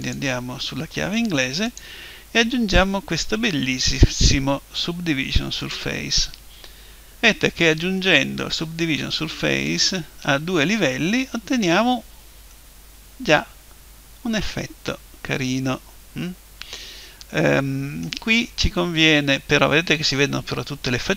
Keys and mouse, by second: 0.0-3.3 drag, 9.7 click, 12.5-14.5 middle drag, 19.7-21.1 middle drag.